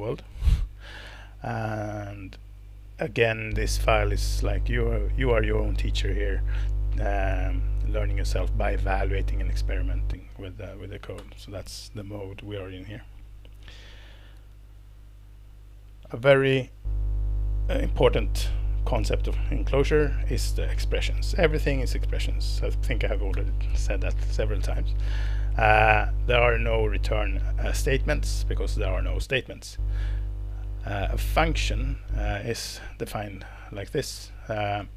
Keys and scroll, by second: 11.2 alt+Return.